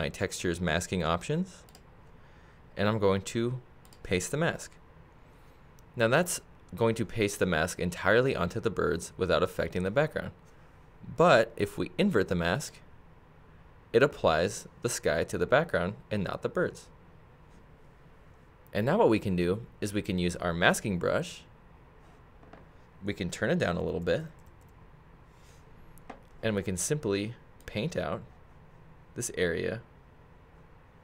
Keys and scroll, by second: 23.8 [.